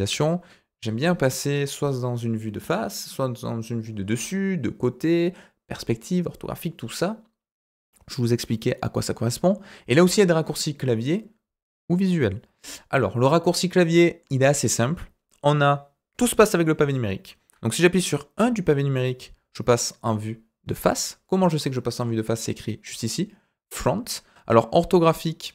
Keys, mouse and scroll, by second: 13.7-14.2 middle drag, 18.4 KP_1.